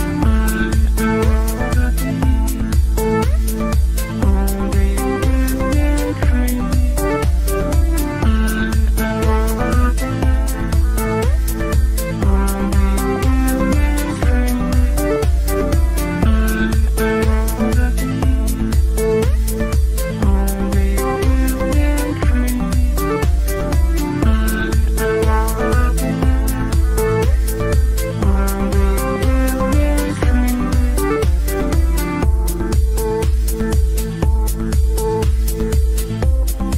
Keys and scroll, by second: 21.6 ctrl+z, 30.9 F3, 31.1 Escape, 36.7 ctrl+z.